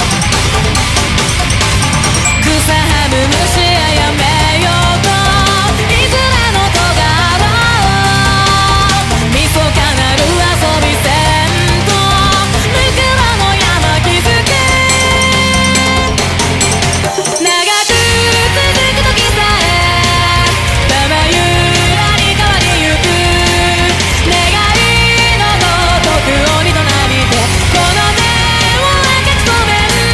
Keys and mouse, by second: 0.3 ctrl+z, 0.6 ctrl+z, 1.2 ctrl+z, 1.4 ctrl+z, 1.6 ctrl+z, 2.4 ctrl+z, 2.5 ctrl+z, 7.4 ctrl+z, 8.3 ctrl+z, 8.5 ctrl+z, 10.8 ctrl+z, 11.4 ctrl+z, 11.6 ctrl+z, 12.0 ctrl+z, 13.5 ctrl++, 13.8 ctrl+z, 15.0 ctrl+z, 16.2 ctrl+z, 16.7 ctrl+z, 17.0 ctrl+z, 17.4 ctrl+z, 17.8 ctrl+z, 19.1 ctrl+z, 19.6 ctrl+z, 20.1 ctrl+z, 21.2 ctrl+z, 21.9 ctrl+z, 22.4 ctrl+z, 22.6 ctrl+z, 23.1 ctrl+z, 24.1 ctrl+z, 25.8 ctrl+z, 26.4 ctrl+z, 28.1 ctrl+z.